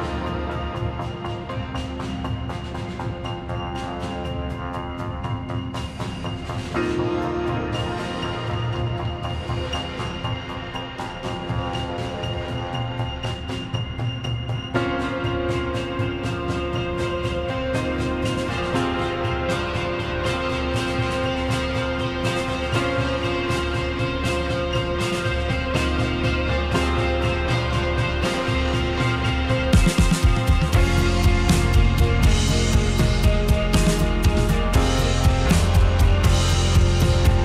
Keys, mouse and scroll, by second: 5.3-5.7 drag, 6.6 middle drag, 8.9 middle drag, 9.2 click, 9.7 shift+click, 13.6 drag, 13.9 click.